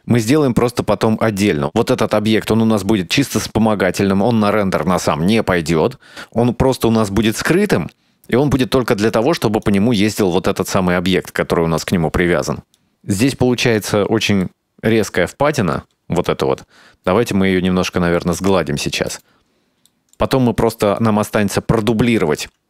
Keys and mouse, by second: 0.4-2.7 drag, 5.5 right click, 11.6 right click, 11.8 right click, 13.4-15.0 drag, 15.3-16.0 middle drag, 16.6 Tab, 17.2 middle click, 17.6 right click, 17.8 Tab, 18.1 middle click, 18.4 right click, 18.7 middle click, 20.4 g, 21.4 middle click.